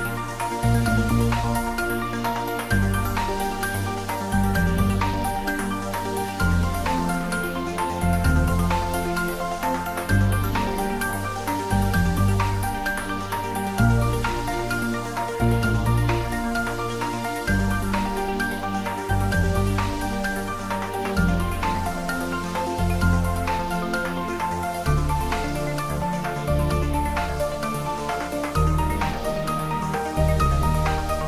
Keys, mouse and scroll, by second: 1.9-3.4 scroll down 1, 4.8 scroll down 1, 4.9 click, 8.0 shift+click, 10.9 shift+click, 14.8 ctrl+z, 16.8 shift+click, 19.3 ctrl+z, 20.9 shift+click, 24.5 shift+click, 28.2 shift+click, 31.0 shift+click.